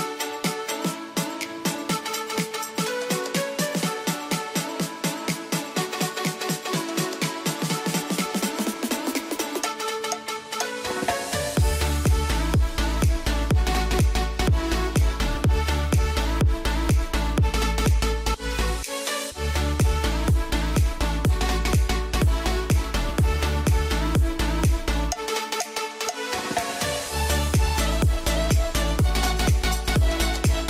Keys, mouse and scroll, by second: 1.4 click, 4.3 ctrl+right click, 4.9-8.3 drag, 8.3 F3, 10.6 F3, 11.8 click, 13.1 right click, 13.5 click, 15.4 ctrl+click, 18.1 F2, 18.5-20.5 drag, 20.5 right click, 21.5 F2, 21.9-24.8 drag, 24.8 F2, 25.1 click, 27.1 shift+Page_Up, 28.5 click, 29.4 e, 29.7 shift+click.